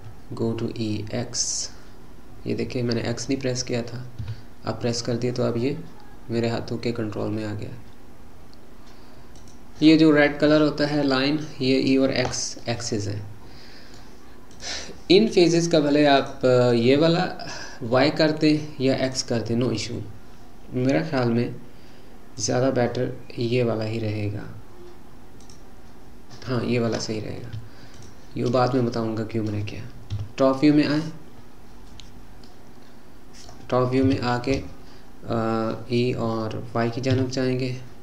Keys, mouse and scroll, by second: 0.0 e, 12.6-14.5 middle drag, 14.5 click, 16.2 click, 19.1 click, 22.4 click, 25.4 click, 27.9 shift+click, 28.7-30.2 middle drag, 30.2 KP_7, 32.5-34.0 middle drag, 34.0 KP_7, 37.1 e.